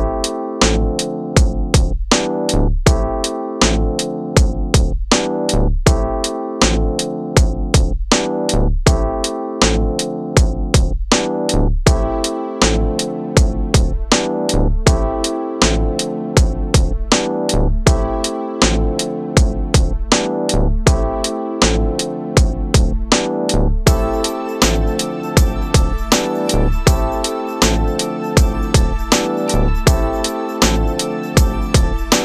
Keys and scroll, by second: 1.1 Return, 1.8 shift+F2, 2.2 ctrl+d, 2.4 space, 5.5 space, 7.8 ctrl+g, 9.4 ctrl+space, 9.6 Return, 13.1 ctrl+KP_Add, 13.8 s, 14.1 ctrl+space, 18.6 space, 19.9 [, 30.2 space.